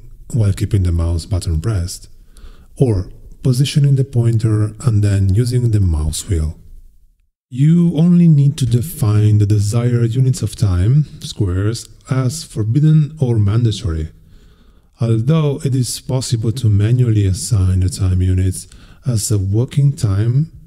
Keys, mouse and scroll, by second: 3.5 click, 4.2-5.6 scroll up 8, 5.6-6.0 scroll down 2, 6.2 scroll down 2, 6.5-7.2 scroll up 4, 9.2 click, 11.2 click, 11.7-12.6 scroll up 6, 13.0 scroll up 2, 15.0 click, 16.3-17.7 drag, 19.6 click.